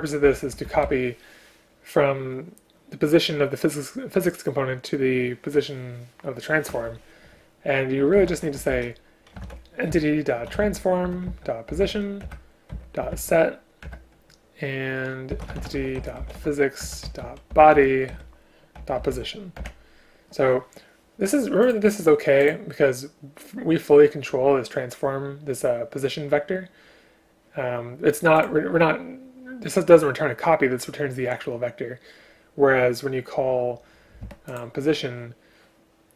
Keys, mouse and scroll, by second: 0.3 Down, 0.7 shift+Home, 0.9 Delete, 11.1 Return, 12.3 Return, 13.9 Return, 16.9 Return, 17.8 Return, 19.6 Return, 34.6 click.